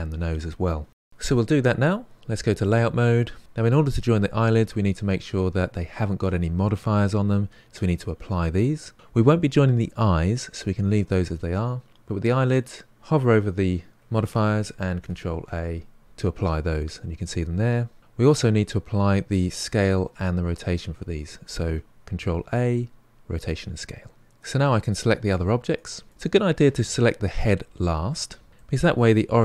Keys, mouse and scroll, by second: 2.9 click, 14.8 ctrl+a, 16.0 ctrl+a, 22.3 ctrl+a, 24.2 click, 25.0 shift+click, 25.7 shift+click, 26.1 shift+click, 28.5-29.4 middle drag.